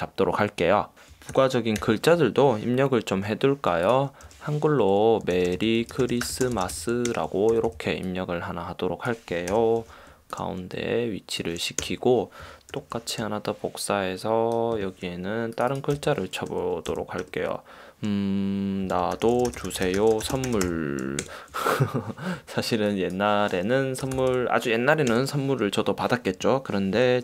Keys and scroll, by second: 0.1 Return, 1.4 super+=, 1.9 super+;, 3.3 t, 4.4-7.6 typing, 9.6 super+;, 9.9 super+t, 11.9 Return, 12.8 super+j, 16.1 d, 16.6 BackSpace, 17.0 d, 17.3 BackSpace, 18.7-21.2 typing, 21.3 super+Return, 24.2 1, 25.3 Return.